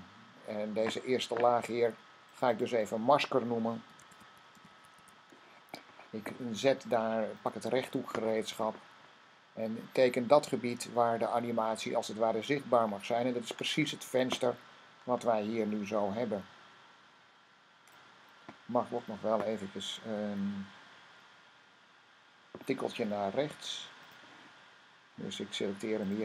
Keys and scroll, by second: 3.6-5.4 typing.